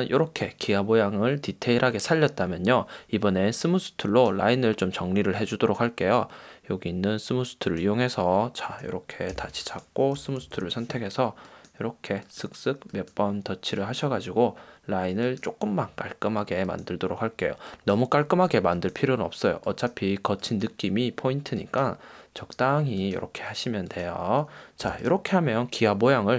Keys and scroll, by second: 9.6 v, 10.7 shift+n, 25.1 v.